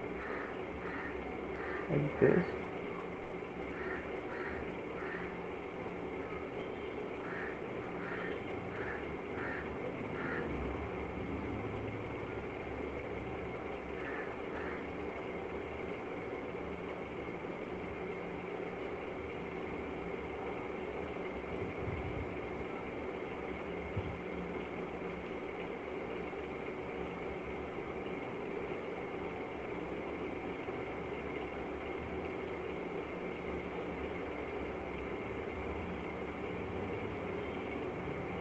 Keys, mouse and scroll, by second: 1.7 click, 2.9 click, 3.5 click, 5.2 right click, 5.2 click, 6.4 click, 6.4 right click, 8.1 click, 9.6 click, 13.3 middle click, 14.0 click, 15.1 click, 16.0 click, 16.0 middle click, 17.7 click, 18.6 click, 19.9 right click, 22.0 right click, 22.0 click, 24.6 click, 26.5 click, 26.5 right click, 28.6 click, 29.9 click, 31.7 click, 33.1 click, 34.0 click, 35.3 click, 37.1 click.